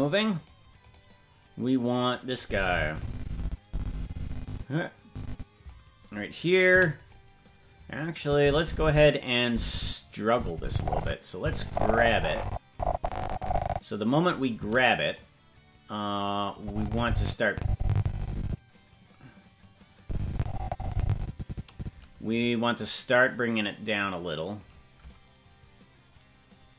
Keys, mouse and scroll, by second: 0.9-2.4 right drag, 2.4-5.7 drag, 6.7 l, 8.2-14.2 drag, 14.6 i, 16.5-21.7 drag, 23.6-24.6 drag.